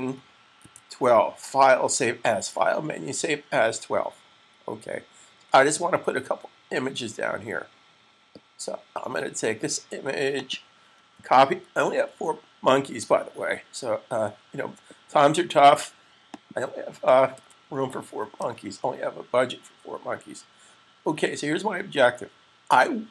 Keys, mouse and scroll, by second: 0.5 click, 10.3 click, 11.0 super+c, 16.1 click, 17.2 super+v, 18.2 super+s.